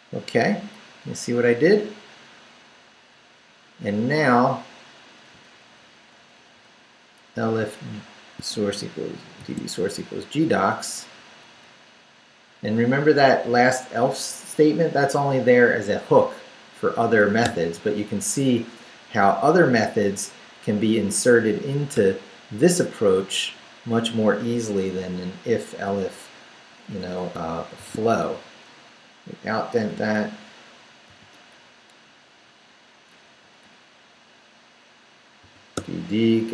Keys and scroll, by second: 1.0 Up, 5.3 Down, 9.4 shift+v, 9.9 shift+Down, 10.6 Down, 11.5 Down, 17.5 d, 19.0 Down, 19.5 Down, 21.9 p, 23.2 Down, 25.0 Up, 25.9 Up, 26.9 Up, 27.8 shift+v, 28.2 shift+Down, 29.0 Down, 29.9 Down, 30.8 shift+Down, 31.3 shift+,, 31.6 shift+Down, 32.4 Down, 33.2 Down, 35.4 d.